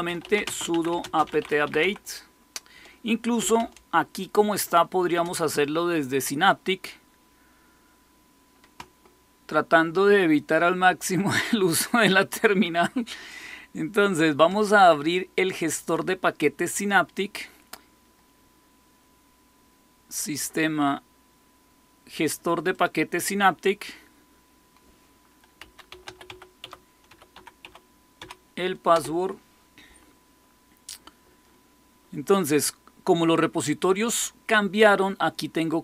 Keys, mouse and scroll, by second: 0.0-2.2 typing, 3.3-5.1 typing, 12.2 click, 13.2 click, 15.7 click, 22.6 click, 25.3-28.1 typing, 28.8 Return.